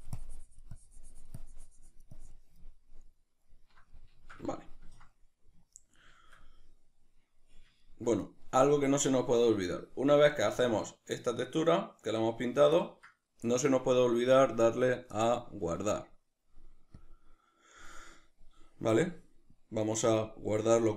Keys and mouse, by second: 2.7-14.8 ctrl+middle drag, 14.8-20.9 drag.